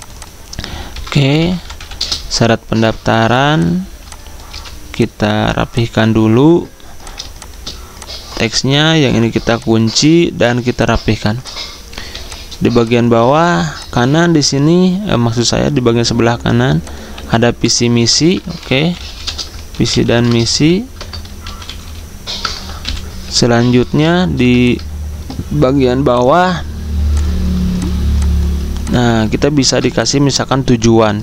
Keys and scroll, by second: 0.8-2.2 typing, 3.8-5.0 typing, 8.2-8.9 typing, 12.4 z, 15.1-15.8 typing, 17.1 t, 17.9 ctrl+a, 18.3-23.0 typing, 30.6 typing.